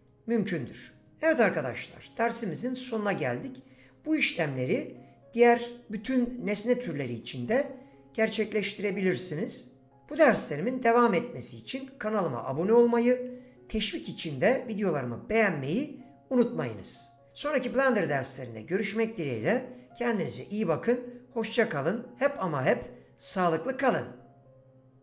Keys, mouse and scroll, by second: 0.1 click.